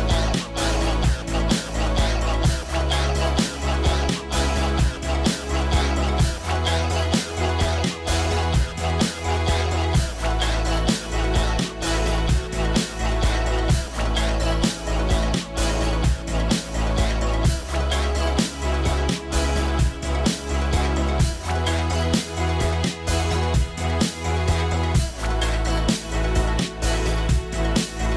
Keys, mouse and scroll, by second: 0.5 scroll down 1, 1.1 scroll up 1, 2.3 scroll down 1, 3.0 scroll up 1, 3.4 scroll down 1, 4.4-4.9 scroll up 1, 5.0 middle click, 11.1 middle click, 21.2-21.6 scroll down 1, 23.4 scroll up 1.